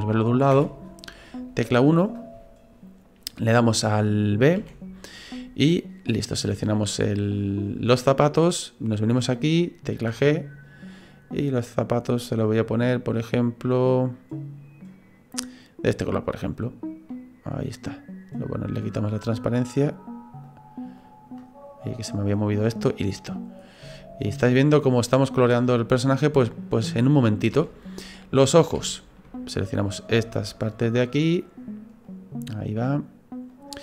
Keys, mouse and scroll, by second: 0.5 KP_1, 4.6 b, 9.9 g, 16.6 right click, 17.1 middle click, 18.8 click, 20.4 click, 21.5-22.4 scroll down 3, 21.9 middle click, 23.6 scroll down 2, 23.9 shift+middle click, 24.4 middle click, 27.6 shift+middle click, 28.0-28.4 scroll down 1, 28.4-28.8 scroll up 6, 28.8 shift+middle click, 29.9 right click, 30.5 shift+right click, 30.9 shift+right click, 31.4 shift+right click, 32.1 right click, 32.5 shift+right click, 32.9 right click, 33.5 shift+right click.